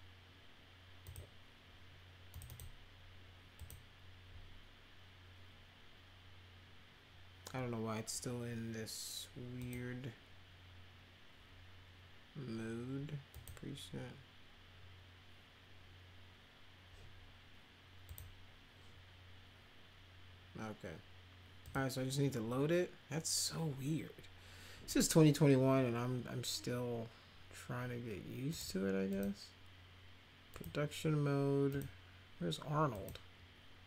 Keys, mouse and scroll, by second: 1.1 click, 2.3 click, 2.5 click, 3.6 click, 9.6 click, 13.3 click, 18.1 click, 21.6 click, 28.5 click, 29.1 click, 30.5 click, 31.7 click, 32.9 click.